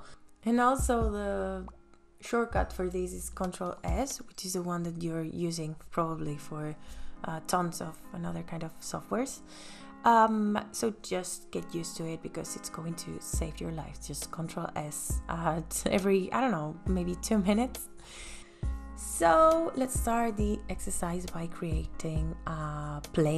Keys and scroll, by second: 12.6 ctrl+s.